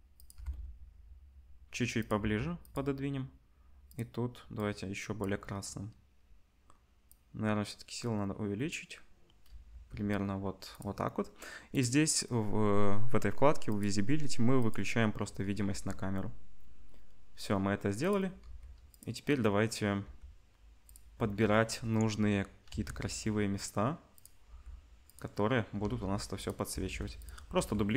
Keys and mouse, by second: 0.3 g, 2.2 g, 7.1-10.8 drag, 9.7 g, 10.8 middle click, 11.7 click, 11.8-13.7 middle drag, 13.7-14.7 drag, 15.6 g, 18.4 r, 20.0 g, 22.7 s, 24.5 g, 25.8 shift+d, 26.7 s, 27.5 g.